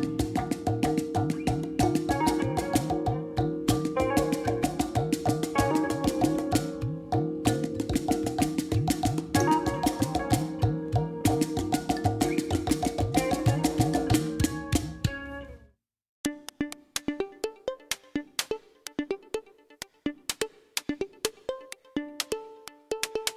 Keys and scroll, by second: 16.9 ctrl+j.